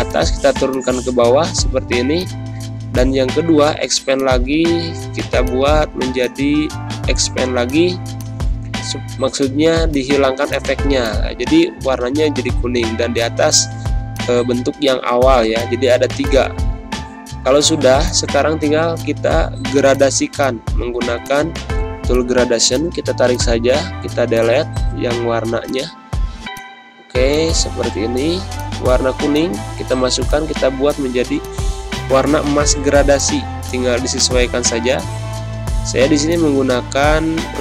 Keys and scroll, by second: 8.8 ctrl+z, 12.2 ctrl+[, 13.3 z, 13.9 space, 17.2 g, 24.9 ctrl+z, 31.9 ctrl+-, 34.4 ctrl+-, 35.5 g.